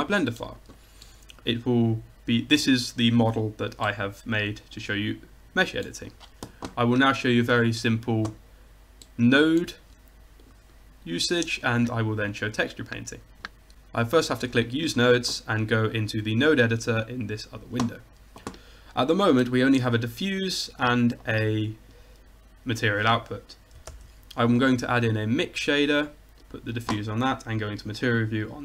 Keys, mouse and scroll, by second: 8.5-11.7 middle drag, 11.7-13.6 drag, 14.3-18.0 drag, 20.5-22.3 drag, 23.9 shift+a, 26.6-27.1 drag, 27.2 click.